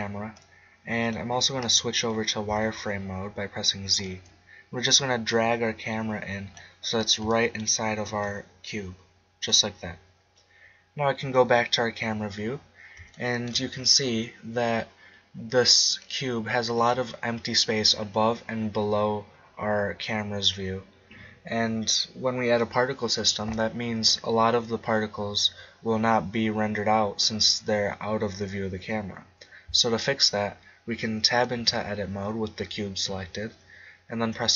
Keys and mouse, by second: 0.4 click, 1.0 click, 2.4 z, 5.0-6.5 drag, 8.2-9.9 drag, 11.4 KP_0, 12.6-15.2 middle drag, 15.9-17.8 right drag, 31.6 Tab.